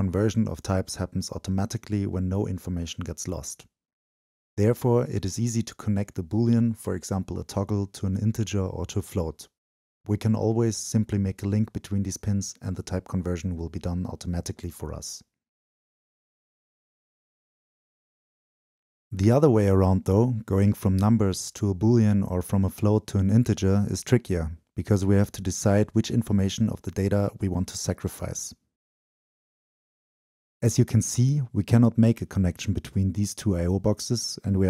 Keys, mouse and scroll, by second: 2.0 click, 4.8 click, 5.6-8.4 drag, 8.4 right click, 10.0 click, 10.6 right click, 11.0-13.3 drag, 13.3 right click, 14.6 click, 16.7-18.0 ctrl+drag, 18.0 ctrl+v, 18.3 scroll down 2, 18.6 right click, 19.3-20.6 drag, 20.8 ctrl+v, 21.2 drag, 21.8-23.7 drag, 24.5 click, 24.7 ctrl+v, 25.1-26.4 drag, 26.9 click, 27.1 ctrl+v, 27.8-31.0 drag, 32.5 click.